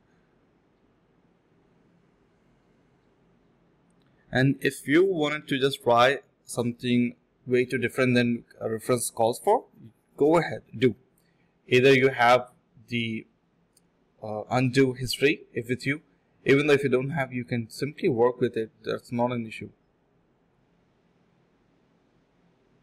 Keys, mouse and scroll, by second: 0.3 shift+click, 0.4 shift+double click, 0.4 shift+click, 1.7 1, 3.2 alt+click, 3.9 alt+click, 5.9 shift+click, 7.0 alt+click, 7.2 alt+click, 7.3 alt+click, 7.7 alt+click, 8.0 alt+click, 9.1-10.1 typing, 9.3 ctrl+b, 11.3 typing, 14.7 alt+click, 15.1 alt+double click, 15.3-15.8 typing, 15.9 alt+click, 16.2 alt+click, 16.4 alt+click, 18.4 alt+click, 18.6 alt+click, 19.7 typing, 21.3 typing, 22.4 shift+click, 22.5 shift+double click, 22.7-22.8 typing.